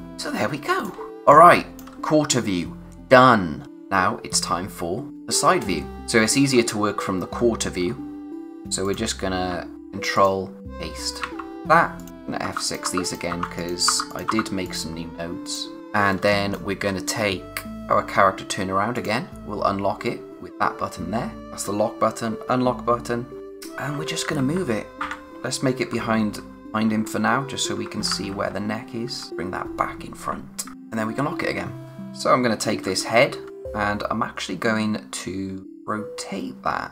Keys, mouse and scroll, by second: 0.0 click, 0.2 space, 1.3 click, 1.6 space, 3.6 click, 6.0 scroll up 1, 8.8 click, 9.7 c, 10.1 click, 11.9 click, 12.4 F6, 12.6 click, 12.8 F6, 13.0 click, 13.3 F6, 13.5 click, 13.8 F6, 14.1 click, 14.2 F6, 14.6 click, 15.8-16.1 scroll down 1, 16.1 space, 16.2 click, 16.8-17.2 scroll up 1, 17.7 click, 30.7 click, 31.8-32.8 scroll up 1, 32.8-33.5 typing, 35.6 click.